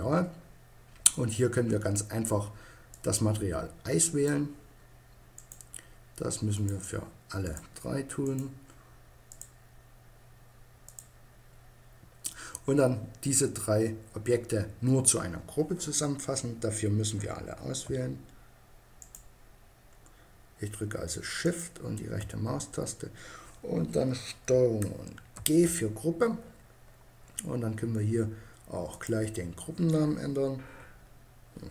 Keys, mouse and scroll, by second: 2.4-4.1 drag, 4.8-9.4 right drag, 6.0 click, 8.7 click, 9.4 middle click, 18.5-20.2 right drag, 20.9-22.7 right drag, 22.7 middle click, 24.8 ctrl+g, 28.3-30.1 drag.